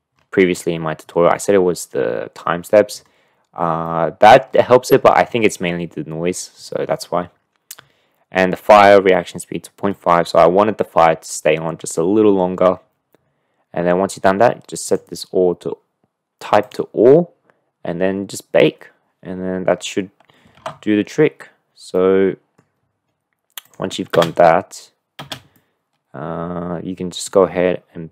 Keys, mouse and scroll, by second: 4.0 middle click, 14.9-17.3 drag, 20.7 ctrl+z, 21.9-22.6 middle drag, 23.7 click, 24.1 space, 25.2 space, 25.5-27.1 middle drag, 27.1 click.